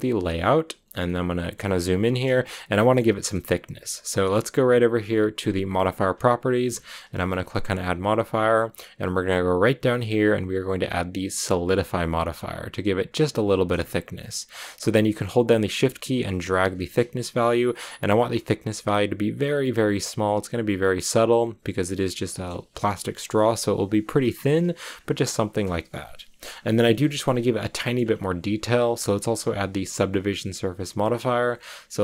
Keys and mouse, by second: 0.9-1.4 drag, 2.4-2.8 shift+drag, 8.2-11.4 drag, 14.5 click, 14.7-16.1 shift+middle drag, 16.1-18.7 shift+drag, 26.5 click, 27.6 click.